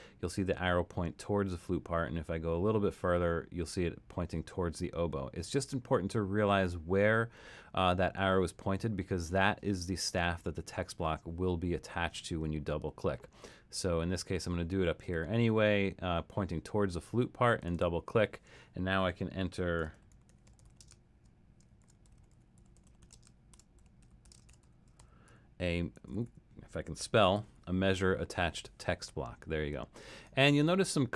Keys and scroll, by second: 19.5-28.0 typing.